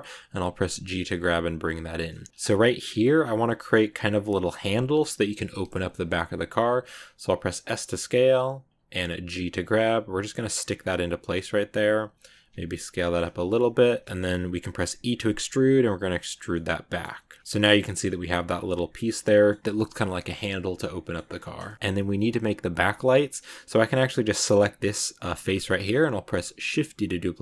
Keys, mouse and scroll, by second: 0.1 g, 2.0 middle click, 2.3-5.2 scroll up 3, 6.1 click, 6.9 s, 9.1 g, 10.5 scroll down 1, 10.6 middle click, 11.3 g, 12.8 scroll down 1, 12.9-14.2 middle drag, 14.2 g, 16.4-17.5 middle drag, 17.5 scroll up 5, 17.7-18.9 middle drag, 18.9 scroll down 1, 19.0 scroll up 1, 19.0 middle click, 19.5 scroll down 2, 20.1-21.2 middle drag, 21.2 Tab, 21.5 shift+middle click, 21.7 scroll up 1, 24.4 right click, 25.4 scroll down 2, 25.5-26.5 middle drag, 26.5 shift+d.